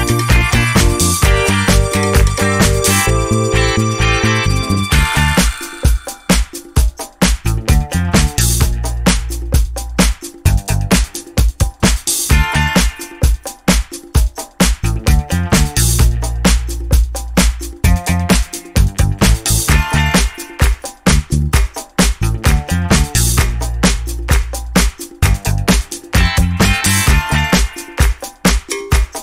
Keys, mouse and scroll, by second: 0.4 click, 0.6 ctrl+shift+click, 0.9 ctrl+shift+d, 1.0 ctrl+shift+click, 1.1 ctrl+shift+d, 1.3 shift+click, 1.7 click, 1.8 click, 2.0 ctrl+x, 2.1 ctrl+click, 2.1 ctrl+click, 2.2 ctrl+click, 2.5 click, 2.6 ctrl+v, 2.7 ctrl+click, 2.8 ctrl+scroll up 2, 3.0 ctrl+shift+click, 3.7 ctrl+z, 4.1 click, 4.7 click, 5.0 shift+click, 5.4 click, 6.2 shift+click, 7.0 Right, 7.3 Left, 7.5 alt+Right, 8.0 Down, 8.7 alt+Down, 9.0 alt+Right, 9.2 KP_5, 9.4 click, 18.0 click, 19.5 shift+click, 20.8 shift+click, 22.2 shift+click, 23.3 shift+click, 24.8 shift+Delete, 26.7 click, 28.4 click.